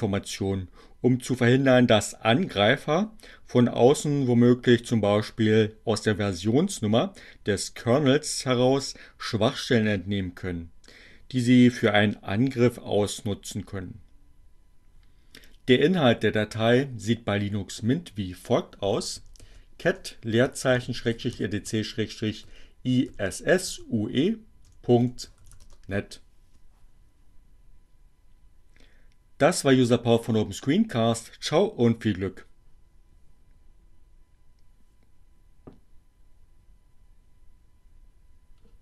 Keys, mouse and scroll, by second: 12.6-17.8 middle drag, 18.8-25.2 typing.